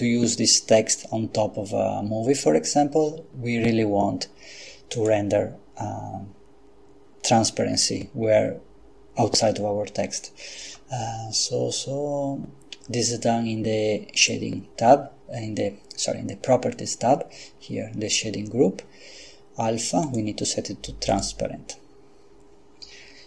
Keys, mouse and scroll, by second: 4.9 click, 14.2 click, 20.0 click, 21.1 click.